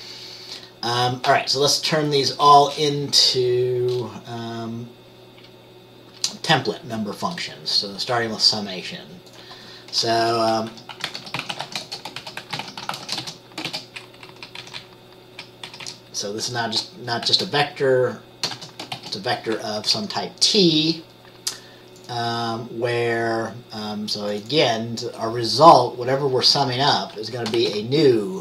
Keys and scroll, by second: 10.3 Return, 10.8-15.2 typing, 15.4 Left, 15.7 Left, 15.8 Left, 17.1-20.6 typing, 27.7 t.